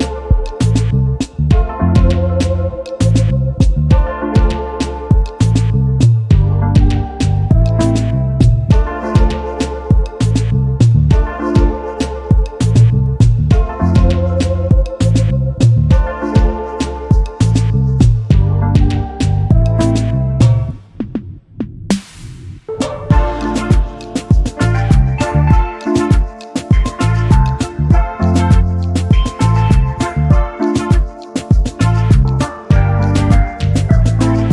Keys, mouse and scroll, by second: 2.0 click, 3.3 ctrl+scroll up 2, 4.1-5.7 ctrl+shift+drag, 6.7 click, 7.4 click, 9.1-11.9 drag, 12.7 ctrl+d, 13.1 ctrl+click, 14.5 space, 15.5 space, 17.9 space, 20.7 space, 22.3 space, 23.4 space, 24.6 space, 26.5 space, 27.6-30.3 drag, 27.6 space, 31.0-32.3 shift+drag, 32.9 ctrl+shift+KP_Add.